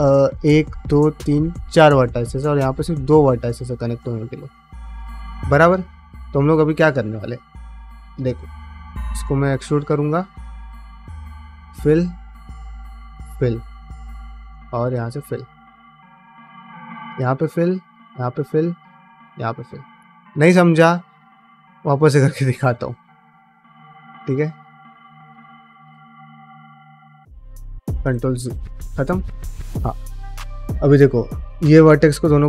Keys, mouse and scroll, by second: 0.2 click, 0.7 shift+click, 1.0 alt+shift+click, 2.4 click, 2.9 shift+click, 3.2-5.0 middle drag, 5.3 ctrl+middle click, 6.1 ctrl+middle click, 6.6 2, 6.8 click, 8.0 e, 9.7 1, 10.3 click, 10.9 f, 12.2 click, 12.6 f, 13.8-19.2 typing, 13.9 click, 14.5 click, 15.2 middle click, 15.7 click, 16.6 click, 17.5 click, 18.3 click, 19.1 click, 19.7 ctrl+middle click, 19.9 middle click, 20.3 ctrl+middle click, 21.2 1, 21.5 click, 21.7 g, 22.4 ctrl+z, 22.6 ctrl+z, 22.7 ctrl+z, 22.9 ctrl+z, 23.1 ctrl+z, 23.2 ctrl+z, 23.4 ctrl+z, 23.6 ctrl+z, 23.8 ctrl+z, 24.0 ctrl+z, 24.2 ctrl+z, 24.4 ctrl+z, 24.6 ctrl+z, 24.8 ctrl+z, 25.0 ctrl+z, 25.3 ctrl+z, 25.5 ctrl+z, 25.6 ctrl+z, 25.8 ctrl+z, 26.1 ctrl+z, 26.4 ctrl+z, 26.6 ctrl+z, 26.8 ctrl+z, 27.0 ctrl+z, 27.3 ctrl+z, 27.5 ctrl+z, 27.9 ctrl+z, 28.3 ctrl+z, 29.0 middle click, 30.3 middle click, 30.9-32.4 typing, 31.2 click, 32.1 click.